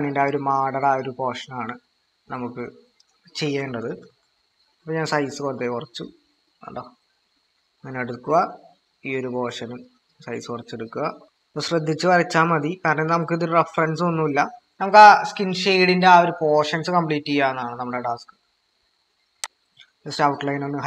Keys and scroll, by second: 3.4-4.1 typing, 7.4 typing, 18.5 ctrl+-.